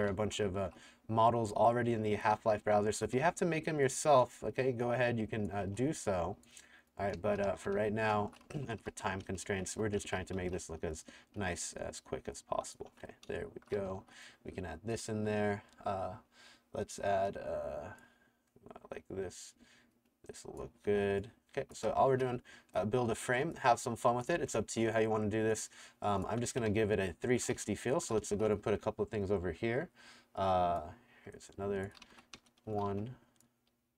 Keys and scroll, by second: 0.0-0.9 typing, 2.3 a, 2.7 w, 4.3 r, 5.6 t, 6.9-11.4 typing, 12.9 Escape, 13.3-14.4 typing, 20.9-25.0 typing, 26.3 Escape, 26.4-28.8 typing, 31.7-33.9 typing.